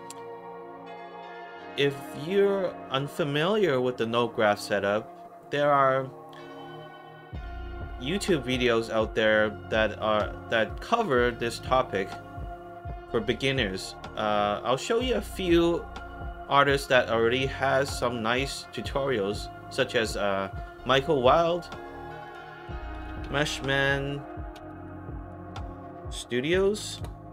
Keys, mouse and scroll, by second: 0.4 alt+middle click, 1.7 alt+right click, 2.6 alt+click, 3.2 alt+middle click, 10.6 alt+right click, 11.2 alt+click, 14.6 click, 15.9 middle click, 15.9 scroll down 2, 17.8-18.5 scroll down 3, 19.3 middle click, 19.3 scroll up 2, 22.2 click, 22.7-27.3 typing.